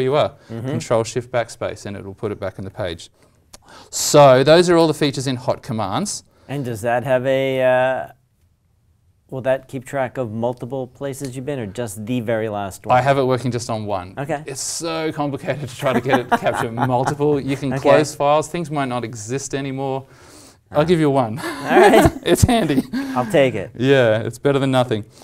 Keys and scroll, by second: 4.7 alt+Tab, 23.3 alt+Tab.